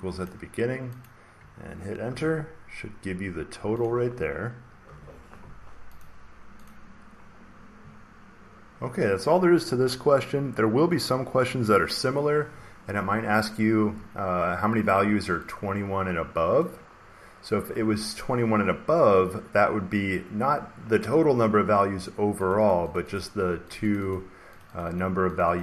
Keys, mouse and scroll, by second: 0.2 click, 1.0 click, 2.0 Return, 3.8 click, 4.5-5.3 typing, 5.9 click, 6.6 click, 8.3 scroll down 1, 8.5 scroll, 8.5 scroll down 3, 16.5 click, 22.4 click, 22.6 click, 22.8 click, 23.1 click, 23.6 click, 23.9 click, 24.0 click, 24.5 click, 24.7 click, 24.9 click, 25.3 click.